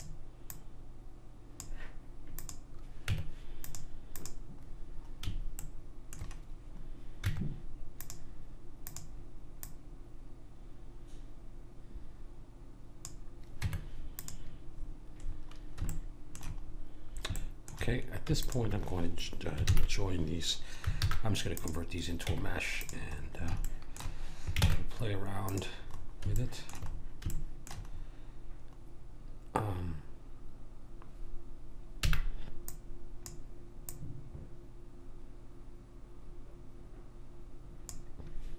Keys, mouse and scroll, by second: 2.4-4.7 drag, 3.1 Tab, 5.6 click, 5.6 right click, 7.2 Tab, 8.8 click, 13.5 Tab, 16.3 middle click, 18.4 click, 19.6 ctrl+j, 21.0 alt+c, 22.3 Tab, 25.4 ctrl+Tab, 32.0 b, 33.8 click, 35.7 click.